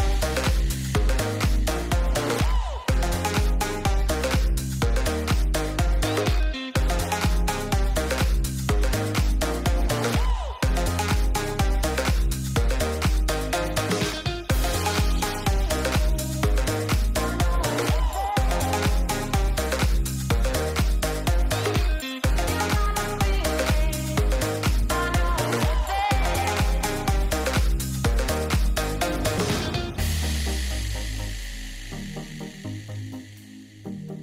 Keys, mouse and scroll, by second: 7.8-9.2 middle drag, 10.5 alt+h, 13.0 g, 14.9 shift+click, 15.6 click, 18.0-19.8 drag, 20.8-21.7 drag, 22.4 click, 23.6 shift+middle click, 25.7 click, 26.9 Tab, 29.8 middle click, 30.5 shift+middle click, 32.7 shift+middle click.